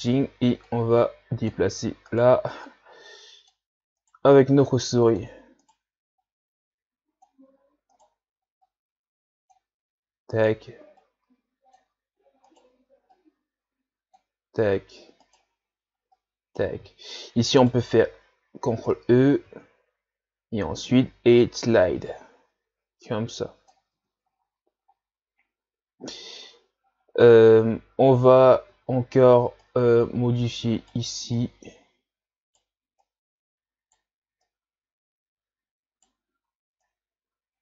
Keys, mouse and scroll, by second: 0.0 right click, 0.7-2.1 drag, 2.1 right click, 2.7-4.0 drag, 4.0 right click, 4.6-5.6 drag, 5.6 right click, 6.2-7.9 drag, 7.9 right click, 8.7-10.3 drag, 10.3 right click, 11.0-12.5 drag, 12.5 right click, 13.1-15.3 drag, 15.3 right click, 16.1-17.6 drag, 17.6 alt+right click, 19.5 ctrl+e, 23.9 Tab, 24.3-24.9 scroll down 1, 24.9 scroll up 3, 28.7 Tab, 29.6 right click, 31.4 right click, 33.0 right click, 34.4 right click, 36.9 right click.